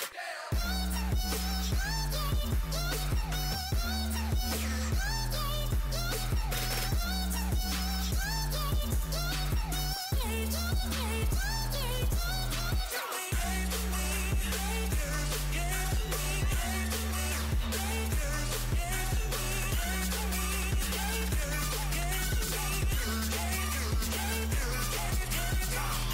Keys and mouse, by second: 9.8-13.7 right drag, 11.4 s, 15.2 z, 18.6 click, 19.2-20.5 right drag, 19.8 a, 21.2 z, 22.3 z, 22.8 z, 24.1 z.